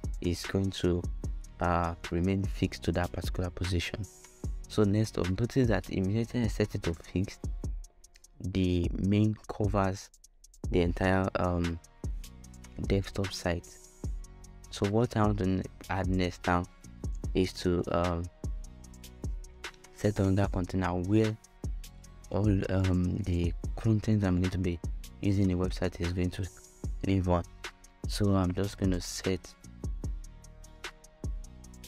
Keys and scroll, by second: 13.0 f.